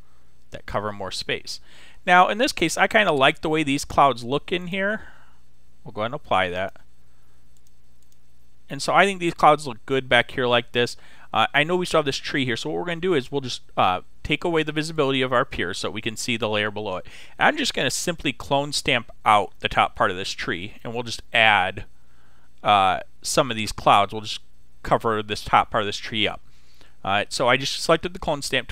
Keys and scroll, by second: 18.0 s, 19.7 ].